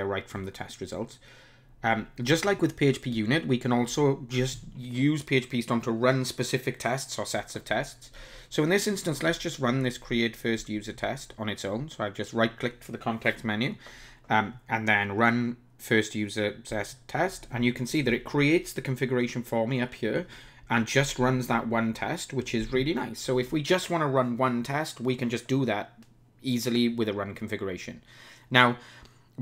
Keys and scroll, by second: 16.9 ctrl+shift+r.